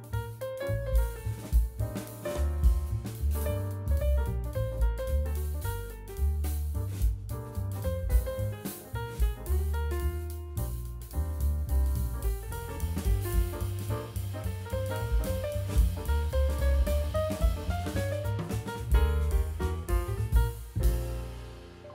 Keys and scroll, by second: 13.0 /, 14.4 v, 16.2 a, 18.4 Delete, 21.3 Delete.